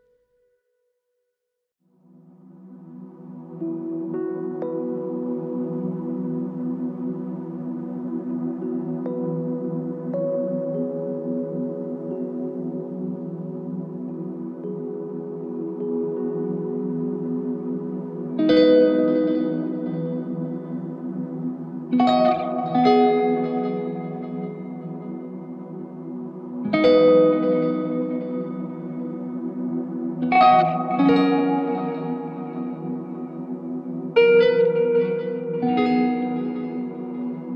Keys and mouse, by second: 0.8 alt+click, 3.3 alt+click, 9.0 shift+click, 11.1 double click, 17.3 double click, 19.9 alt+click, 21.1 alt+click, 22.9 alt+click, 25.3 ctrl+click, 26.4 alt+click, 33.3 alt+click, 36.9 alt+click.